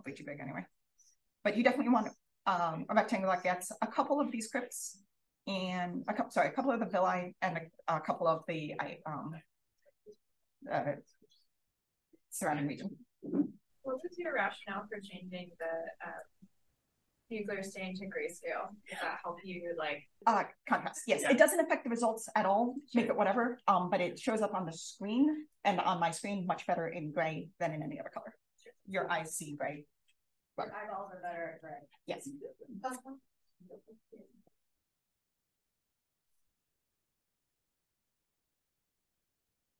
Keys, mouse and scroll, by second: 1.7-11.9 scroll up 1, 11.9-16.9 scroll up 1, 16.9-22.2 scroll up 1, 22.2-30.7 scroll up 1, 30.7-32.4 scroll up 1.